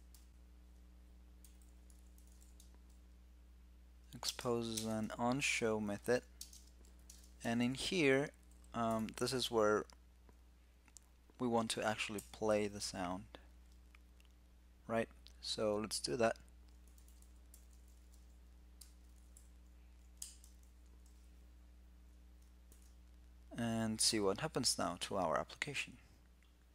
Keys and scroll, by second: 7.3 alt+´, 22.4 super+s, 26.5 super+r.